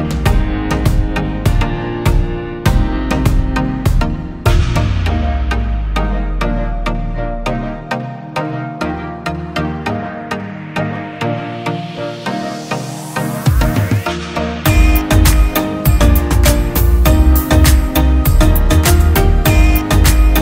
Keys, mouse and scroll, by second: 15.6 ctrl+t, 16.3 alt+shift+click.